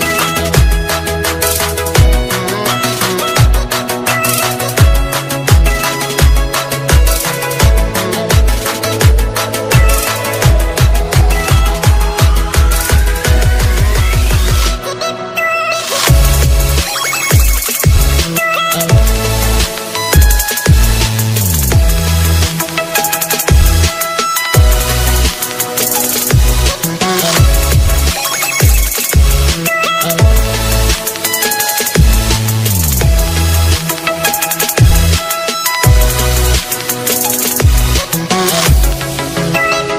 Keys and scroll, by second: 26.0 alt+space, 31.0 alt+space, 33.4 ctrl+space.